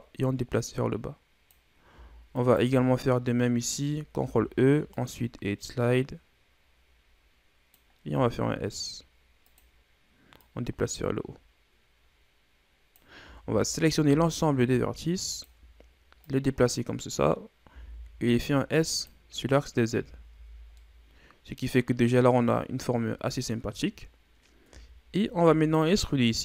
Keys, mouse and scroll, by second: 2.3 alt+right click, 4.2 ctrl+e, 8.1 s, 10.4-13.1 drag, 13.1 a, 13.4 a, 14.1 s, 16.2-17.6 drag, 17.6 s, 19.9 Tab, 20.3 a, 20.5 scroll down 3, 20.8-22.3 middle drag, 22.3-23.5 scroll up 2, 23.5 shift+scroll down 1, 24.3-24.7 scroll up 1, 24.7 Tab, 25.8 alt+right click.